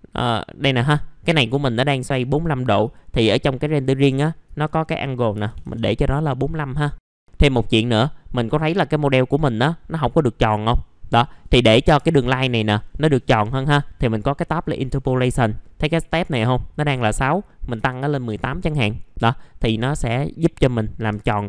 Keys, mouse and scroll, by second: 5.3 KP_4, 11.6 scroll up 1, 11.9 F3, 14.3 click, 15.9-16.9 drag, 17.7 KP_1, 19.2 middle click, 19.6 F3.